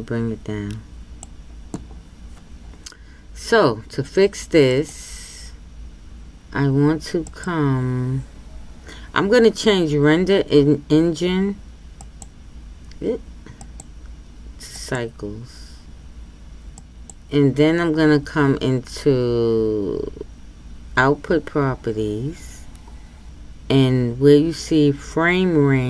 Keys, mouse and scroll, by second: 0.0-25.8 drag.